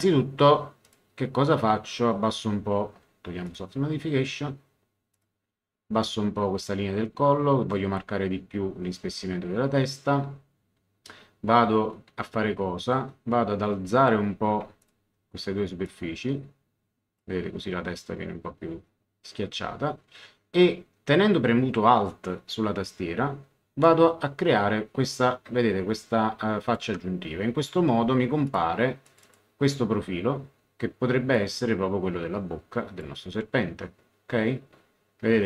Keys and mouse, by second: 0.8 click, 3.4 click, 5.1 click, 6.6 click, 12.8 click, 14.8 ctrl+click, 15.8 click, 23.8 alt+click, 28.4 click, 31.3 click.